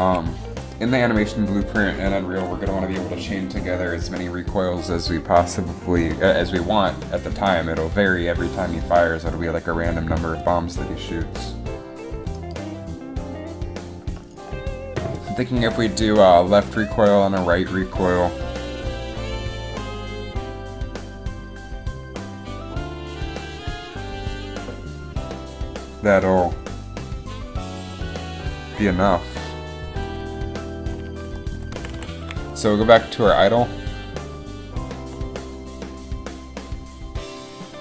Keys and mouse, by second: 31.9 a, 32.1 a.